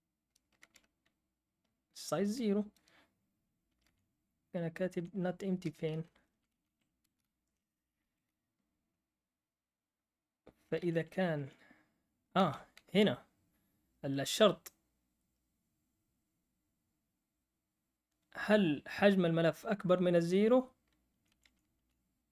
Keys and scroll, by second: 3.8 Up, 5.6 Return, 5.9 typing, 7.0 typing, 10.9 Up, 12.1-12.8 typing, 21.0 Down, 21.3 Down, 21.5 Down, 21.7 Down.